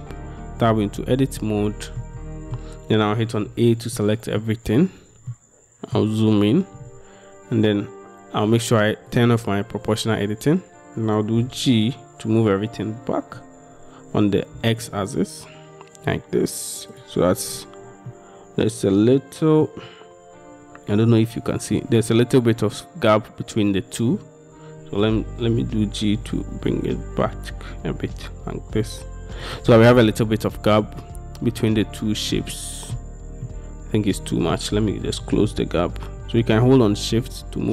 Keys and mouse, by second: 0.6 Tab, 1.1-2.1 middle drag, 2.3 middle click, 4.0 middle click, 4.0 a, 5.4 middle click, 9.2 middle click, 11.5 g, 14.6 x, 17.0 click, 18.2 click, 19.2 click, 21.2 click, 25.1 g, 25.8 z, 27.3 x, 29.5 click, 31.1-33.0 drag, 33.5-34.6 drag, 35.2 g, 35.3 x.